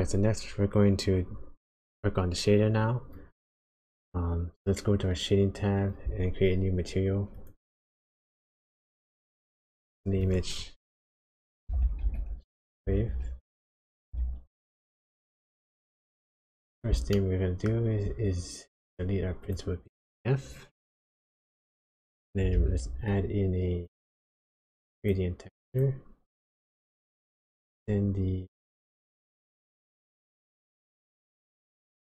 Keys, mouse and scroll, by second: 7.3 click, 8.6 click, 9.1 click, 9.7 click, 16.4 click, 17.1 middle click, 19.4 click, 21.2 x, 21.7 click, 22.5 shift+a, 27.2 shift+a.